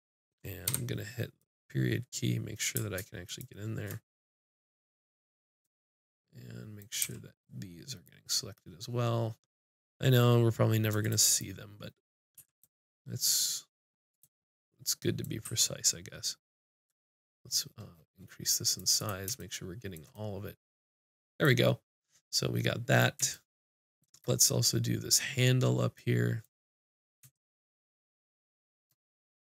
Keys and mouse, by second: 0.7 KP_Decimal, 2.1 click, 2.1 right click, 3.2 click, 4.1-5.2 drag, 7.0-10.2 drag, 7.0 c, 11.4-14.4 middle drag, 12.4 c, 15.4 c, 19.1-21.3 drag, 23.4 middle click, 26.1-27.6 middle drag, 28.1-29.2 middle drag.